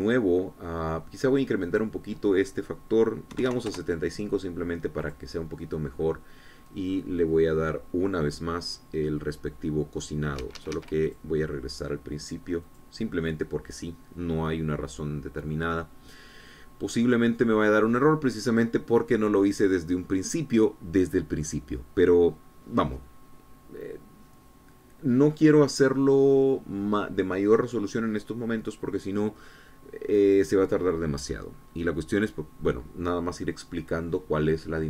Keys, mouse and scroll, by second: 2.5 click, 4.2 KP_7, 4.2 KP_5, 4.5 KP_Enter, 5.9 click, 11.2 Escape, 11.9 click, 13.5 click.